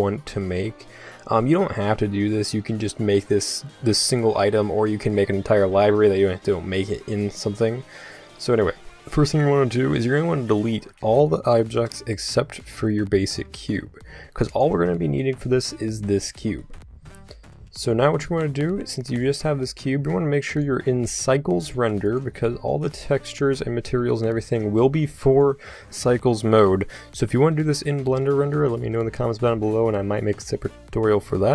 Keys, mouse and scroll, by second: 10.5-13.2 right drag, 13.4 x, 15.0-16.6 middle drag, 16.9-19.0 middle drag, 20.5-31.5 drag.